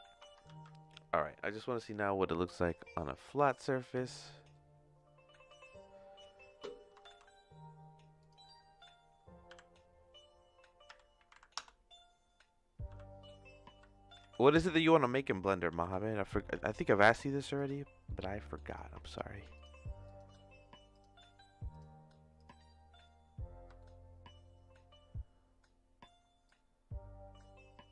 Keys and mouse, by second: 0.4 ctrl+s, 7.0 shift+a, 9.5 r, 12.9 g, 18.0 middle click, 19.1 click, 20.1 click, 20.9 click, 21.8 click, 23.7-26.0 shift+middle drag, 26.4-27.9 drag.